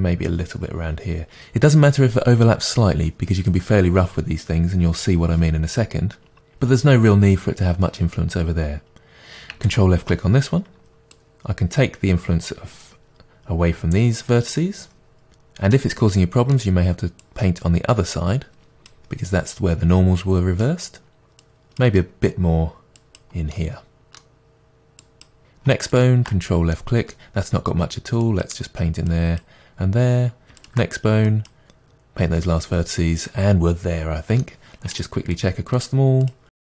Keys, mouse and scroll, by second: 10.9 scroll down 1, 11.0 shift+middle click, 11.2-15.8 drag, 15.8-17.2 middle drag, 17.2-20.6 drag, 20.6-21.4 middle drag, 21.4-23.6 drag, 23.6-25.0 middle drag, 25.0 click, 26.8-28.3 middle drag, 28.3-30.6 drag, 31.3-33.3 drag, 33.3-35.0 middle drag, 35.0-36.6 ctrl+drag.